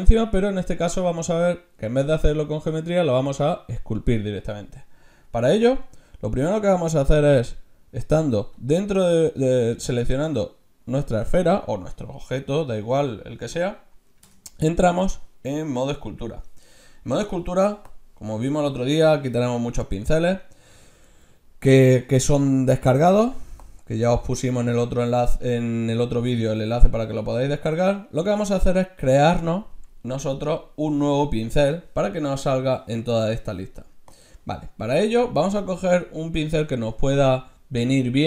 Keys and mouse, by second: 14.3 Tab, 17.9-23.3 drag, 32.0-34.0 drag.